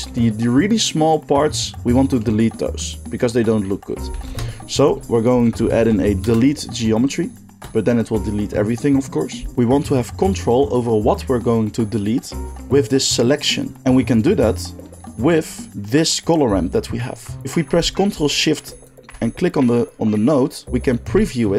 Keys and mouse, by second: 4.1 shift+a, 18.6 ctrl+shift+click, 19.6-21.5 drag.